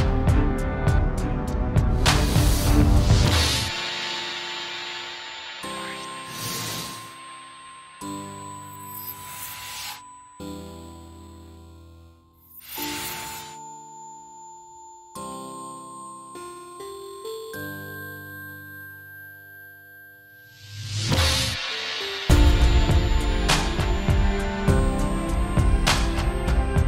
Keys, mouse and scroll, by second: 0.1 middle click, 0.4 middle click, 1.5 ctrl+space, 1.8 z, 2.0 middle click, 2.0 scroll down 1, 2.2 middle click, 2.3 scroll up 1, 2.4 shift+middle click, 2.7 middle click, 4.0 KP_0, 4.0 scroll down 3, 4.1 shift+middle click, 4.2-4.6 scroll up 5, 4.6 shift+middle click, 11.5 ctrl+space, 11.9 ctrl+Tab, 12.3 alt+a, 12.4 click, 12.9 ctrl+space, 13.2 n, 22.3 ctrl+space, 23.1 scroll down 3, 23.2 z, 24.2-24.8 scroll up 5, 24.2 z, 24.2 n, 24.4 shift+middle click, 24.8 click, 25.3 click, 26.5 ctrl+space, 26.6 scroll down 4, 26.7 scroll up 2.